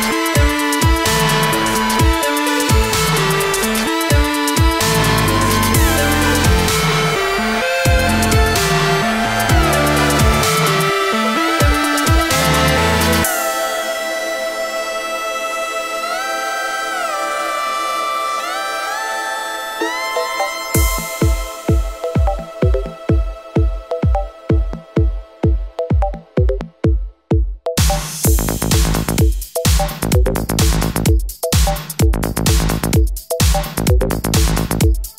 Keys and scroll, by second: 2.4 ctrl+z, 18.1 space, 20.0 space.